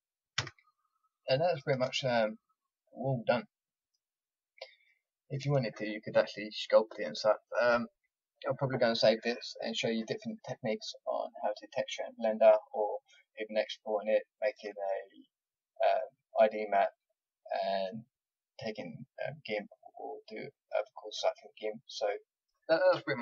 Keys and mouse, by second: 0.3 a, 1.7 Tab, 4.1 middle click, 12.5 middle click, 15.7-17.1 middle drag, 19.8-21.8 middle drag.